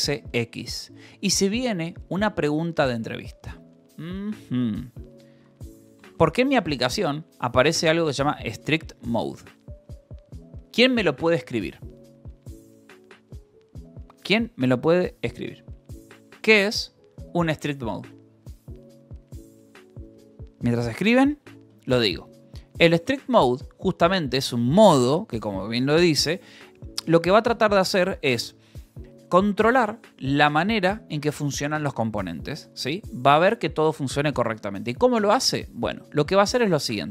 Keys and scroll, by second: 0.8 Escape, 4.8 j, 6.4 shift+v, 22.6-25.3 typing, 26.6 Escape, 35.0-36.6 typing, 36.8 Escape.